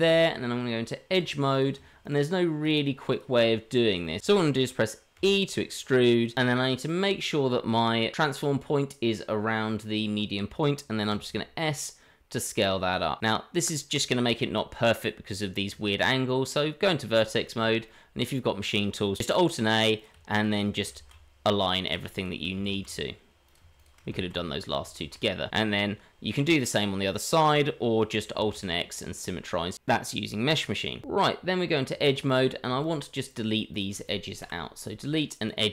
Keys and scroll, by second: 0.0 Tab, 5.1 e, 6.3 Escape, 11.1 s, 15.7 Tab, 22.7 alt+a, 24.3 alt+a, 28.6 alt+x, 31.0 Tab, 34.4 Delete.